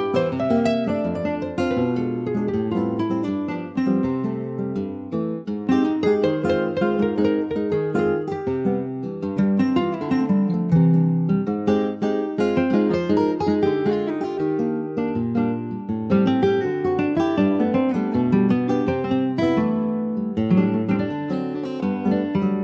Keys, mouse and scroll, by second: 0.3 Tab, 0.5 click, 1.0 ctrl+s, 1.2 click, 2.1 /, 2.8 /, 3.2-4.4 middle drag, 4.4 /, 5.0 click, 5.5 click, 6.1 /, 7.0-8.1 middle drag, 8.1 ctrl+s, 10.3 middle click, 10.6 Tab, 10.8 middle click, 11.1-11.7 scroll up 2, 11.7 3, 11.9 click, 12.2-12.6 scroll up 1, 12.6 alt+shift+click, 13.1 alt+shift+click, 13.9 x, 15.1-16.3 middle drag, 16.3 2, 16.5 click, 17.4 alt+shift+click, 18.8 f, 19.5 middle click, 20.4 alt+shift+click, 20.8 click, 21.3 click, 21.9 alt+shift+click, 22.4 f, 22.5 click.